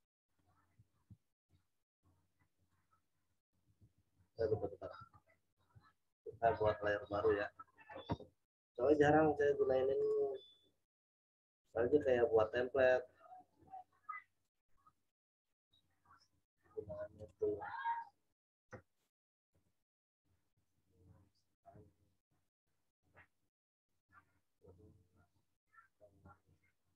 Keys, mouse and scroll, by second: 0.9 ctrl+z, 1.3 right click, 2.5 click, 3.8 ctrl+z, 4.3 ctrl+alt+z, 8.8 ctrl+click, 14.8 ctrl+click, 19.5 shift+click.